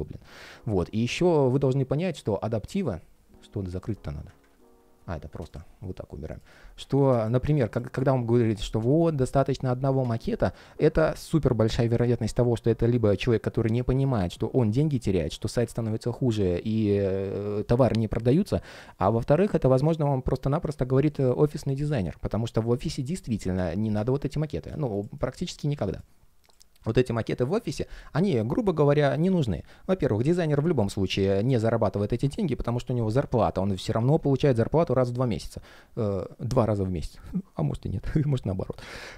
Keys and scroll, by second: 4.1 super+\, 31.8 super+z.